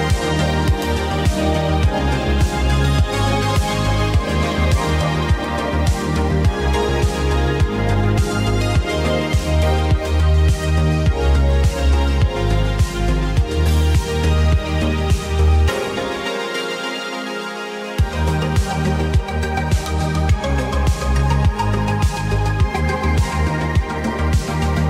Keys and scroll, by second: 0.9 c, 1.3 m, 9.4 ctrl+z, 10.6 ctrl+d, 21.3 ctrl+z, 21.5 ctrl+y.